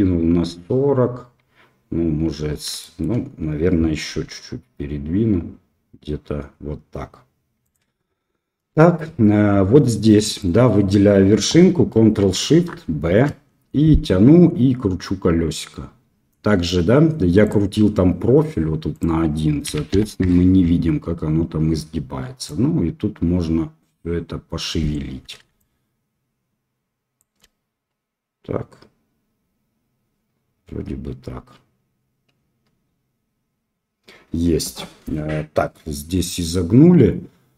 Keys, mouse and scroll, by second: 2.8 shift+middle click, 4.0 g, 8.7 shift+middle click, 10.3-11.9 drag, 13.0 ctrl+shift+b, 19.0-20.6 drag, 22.6-24.9 drag.